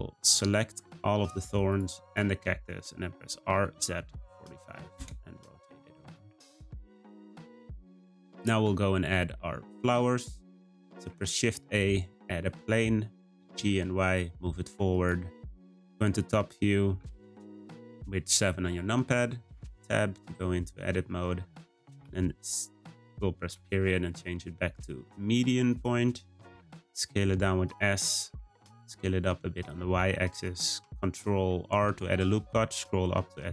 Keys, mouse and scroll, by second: 0.3 shift+click, 0.8 shift+click, 1.7 shift+click, 2.1 shift+click, 3.3 r, 5.8 scroll down 2, 6.1 click, 6.4-10.9 middle drag, 10.9 shift+a, 13.2 g, 17.8-18.5 shift+middle drag, 18.5-19.5 scroll up 2, 19.5 Tab, 20.8 1, 22.0 s, 23.5 ., 26.5 s, 28.2 s, 30.3 r.